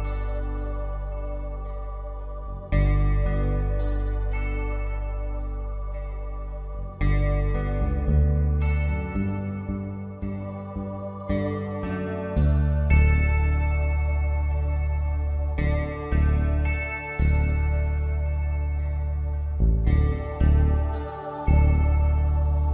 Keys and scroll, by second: 12.4 ctrl+shift+], 16.8 d.